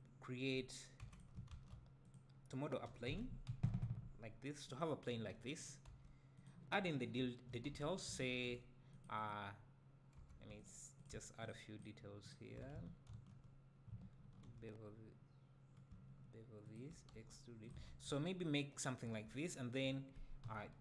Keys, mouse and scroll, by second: 1.0 x, 1.5 shift+a, 2.9 r, 4.8 click, 5.1 g, 5.6 click, 5.9 s, 6.5 click, 7.2 `, 7.7 Tab, 8.3 ctrl+r, 9.3-10.2 right drag, 10.2 2, 10.6-11.5 alt+drag, 11.8-13.1 alt+shift+drag, 13.1 ctrl+v, 14.2 ctrl+b, 16.8 shift+click, 17.1 e, 17.7 drag, 20.4 KP_7.